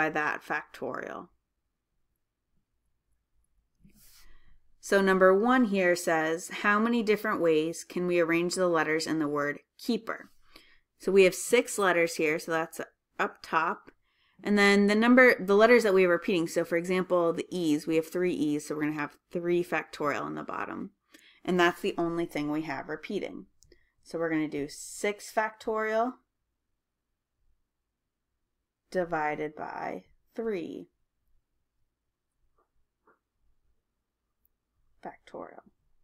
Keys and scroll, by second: 8.9-9.6 typing, 27.6 Left, 27.6 Return, 27.6 6, 33.3-34.1 typing.